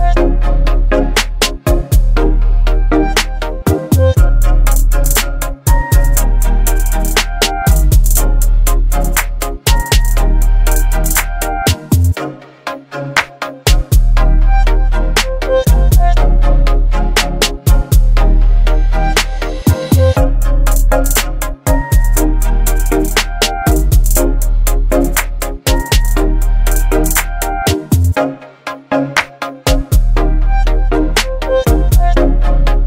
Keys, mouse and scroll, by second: 5.0 Return, 5.6 ctrl+0, 7.7 click, 12.7 shift+click, 14.3 ctrl+g, 15.9 click, 19.2 click, 19.3-22.5 typing, 23.0 Return, 29.7 click, 31.2 b, 31.7 right click.